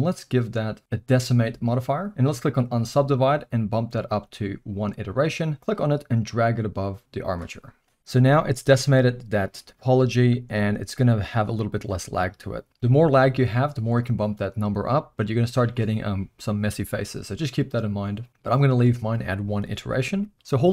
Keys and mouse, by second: 2.4 click, 4.3 click, 5.6-7.3 drag, 8.1 z, 9.6-10.3 middle drag, 10.4 z, 14.0 click, 15.9-16.4 middle drag, 18.7 click.